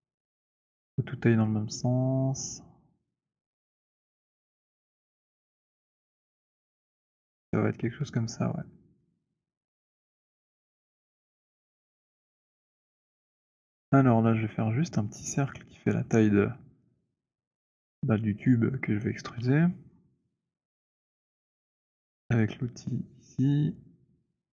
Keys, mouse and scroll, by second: 0.5 z, 6.7 click, 19.4-20.5 scroll, 20.5-21.8 scroll, 22.5 click, 23.6 click.